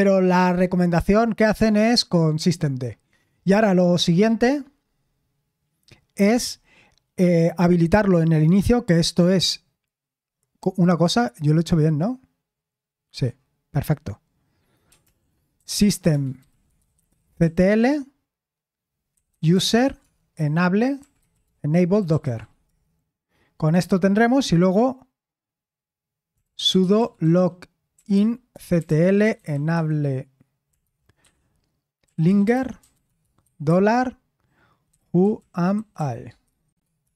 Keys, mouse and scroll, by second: 0.1 click, 6.3 q, 13.1-14.9 scroll down 1, 14.9 scroll down 1, 15.0 ctrl+l, 15.5-23.0 typing, 26.1-37.1 typing.